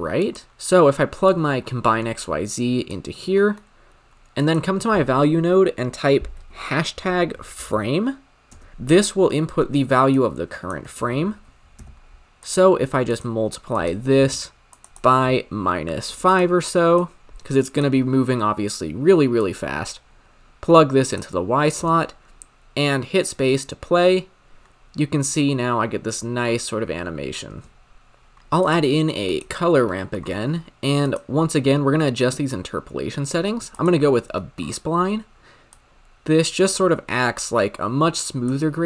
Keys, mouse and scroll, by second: 0.5-1.4 middle drag, 1.4 click, 3.3 middle click, 3.6-4.4 scroll up 1, 4.4-8.5 drag, 10.1 click, 11.0 shift+a, 13.7 click, 14.2 m, 14.9-16.4 drag, 17.0 drag, 19.3 click, 22.9 space, 25.2-26.5 scroll down 7, 26.5-27.4 scroll up 6, 27.4 space, 28.3 click, 28.7 shift+a, 29.9 middle click, 30.3-31.0 scroll up 8, 31.0-34.2 drag, 34.5 middle click, 34.7-35.8 scroll up 6, 35.8-38.8 drag.